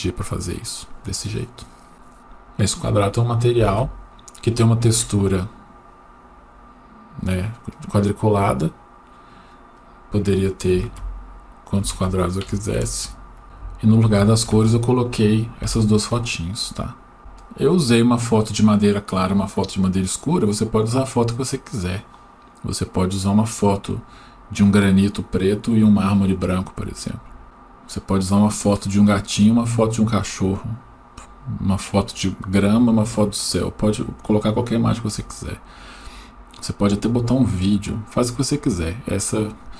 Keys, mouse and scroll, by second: 5.2-6.5 scroll down 1, 6.5-8.2 scroll up 1, 8.2-10.5 drag, 12.8 ctrl+z, 16.8-18.8 scroll down 1.